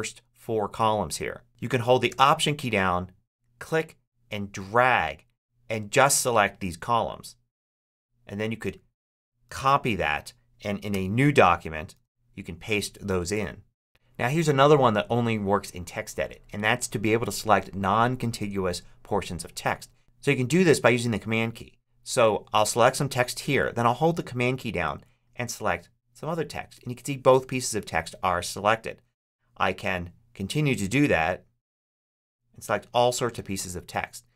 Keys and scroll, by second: 9.3 alt+super+c, 10.8 super+n, 11.8 super+v.